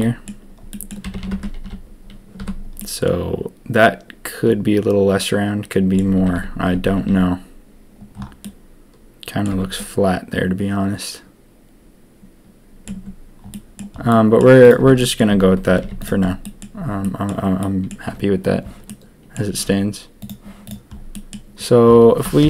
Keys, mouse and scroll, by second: 0.0 middle click, 0.7 click, 1.0 a, 1.2 a, 1.3 Tab, 1.4 a, 1.6 a, 2.4 Tab, 2.7-4.4 drag, 4.4 middle click, 5.3 middle click, 6.1 a, 6.3 a, 6.7 Tab, 6.9 a, 7.1 a, 8.4-9.4 middle drag, 9.5 Tab, 9.7-10.8 middle drag, 10.9-13.3 middle drag, 12.9 Tab, 13.5 middle drag, 14.1 drag, 14.6 click, 14.8 Tab, 14.9 click, 15.3 Tab, 15.6 a, 15.8 a, 16.0 click, 16.4 click, 17.0 click, 17.6 click, 18.8 click, 21.1 drag, 22.4 ctrl+KP_3.